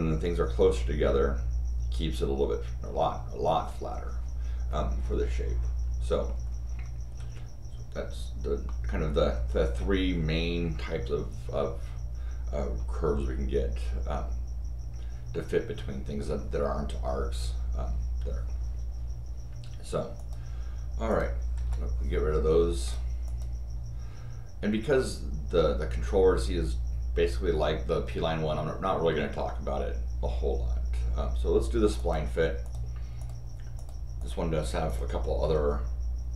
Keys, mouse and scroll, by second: 7.2 Escape, 8.6 middle click, 12.8 scroll up 2, 20.2 click, 21.1 click, 22.8 click, 23.2 click, 31.9 click, 32.6 click, 33.2 click, 33.7 click, 34.2 click, 34.9 click.